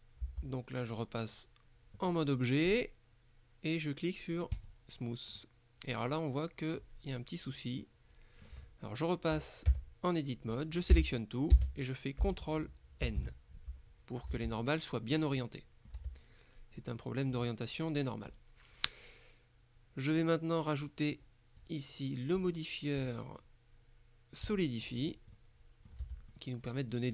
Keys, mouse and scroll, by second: 0.3 Tab, 4.6 click, 5.5-7.4 middle drag, 7.9-9.0 middle drag, 9.8 Tab, 11.0 a, 13.1 ctrl+n, 14.4 Tab, 15.3-16.5 middle drag, 16.1 Tab, 16.9-18.9 middle drag, 21.2 click, 22.5 click, 24.5 click, 25.0-25.4 scroll up 1, 25.4 middle click, 26.1 Tab, 26.4 middle click.